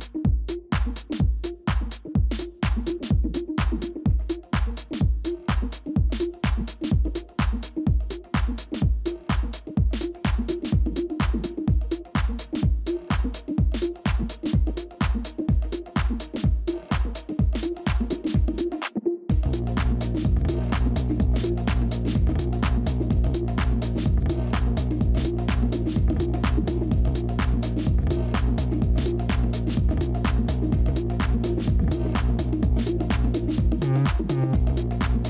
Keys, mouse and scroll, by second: 5.6 double click, 6.2-7.5 typing, 11.2 space, 14.6 ctrl+-, 14.8 ctrl+-, 15.7 ctrl+d, 15.9 ctrl+d, 16.1 ctrl+d, 16.4 ctrl+-, 17.7 ctrl+d, 25.5 ctrl+click, 26.0 ctrl+click, 31.7 ctrl++, 32.2 space, 32.9 ctrl++, 33.0 ctrl++, 33.4 space, 34.8 space.